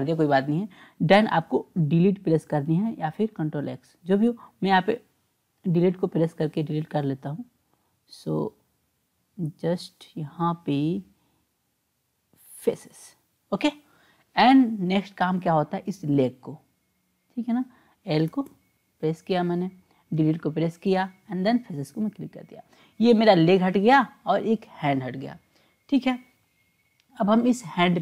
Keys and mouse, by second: 6.3 Delete, 16.8 click, 18.3 l, 18.5 l, 20.1 Delete, 27.7 click.